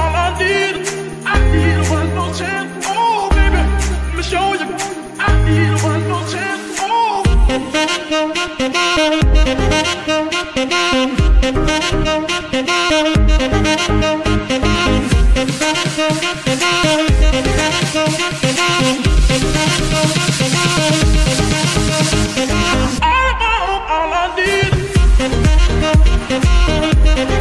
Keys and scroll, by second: 5.3 shift+f, 8.6 shift+KP_3, 9.3 shift+d, 11.4 Escape, 12.3 c, 14.2 g, 14.4 y, 18.2 g, 18.3 y, 20.0 g, 23.6 g, 25.2 shift+g.